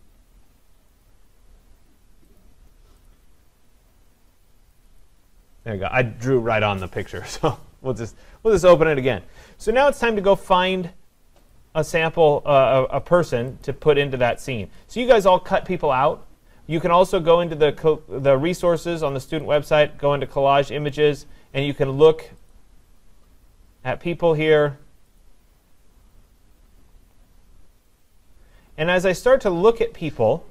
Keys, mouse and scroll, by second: 1.0 click, 2.4 click, 3.1 click, 4.8 click, 5.0 click, 11.6 click, 13.7 click, 14.4-16.5 scroll, 19.6 click, 21.1 scroll, 22.5 click, 24.1-24.6 scroll, 25.2 click, 28.2-28.7 scroll, 29.2 scroll down 5, 29.8-30.5 scroll down 3.